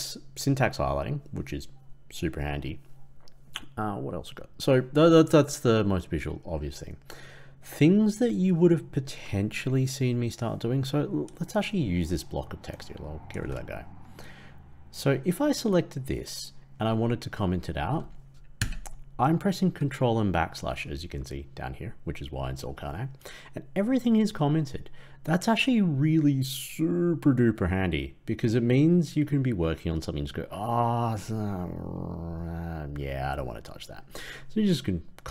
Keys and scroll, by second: 13.3 ctrl+x, 19.3 ctrl+/.